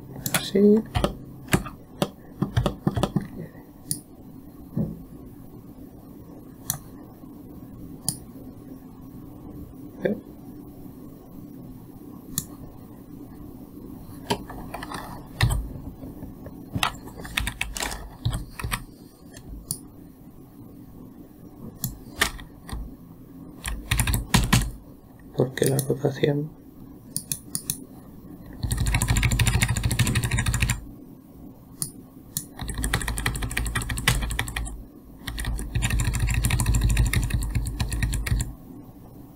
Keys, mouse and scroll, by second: 1.5-4.3 alt+middle drag, 4.3 click, 8.5-11.5 drag, 17.9 Down, 19.1 Up, 20.1 click, 23.2-24.1 Left, 24.4 Right, 24.6 Right, 24.8 Left, 25.0 Left, 26.1 click, 27.6 click, 28.0 click, 29.1-30.8 Right, 31.0 Right, 31.1 Right, 32.3 click, 33.1-34.9 Left, 35.0 Left, 35.8 Left, 35.9 Left, 36.2-38.0 Right, 38.3 Right, 38.5 Right, 38.8 Right.